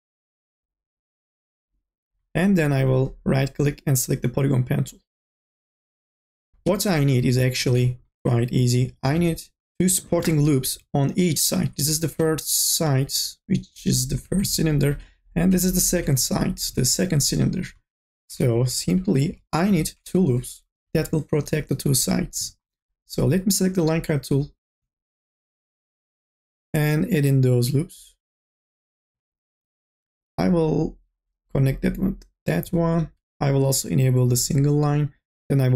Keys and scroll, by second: 6.2-7.2 typing, 10.5 2, 10.8 3, 18.4 1, 19.2 k, 20.9 k.